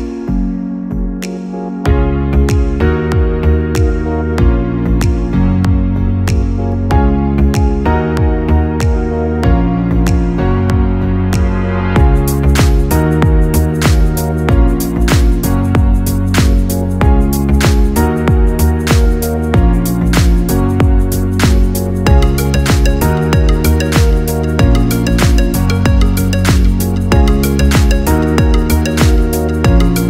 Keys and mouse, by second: 7.1-9.4 drag, 9.4 Tab, 10.8 click, 12.2-15.2 drag, 15.6-18.7 drag, 20.6 click, 21.8 click, 23.4-26.5 drag.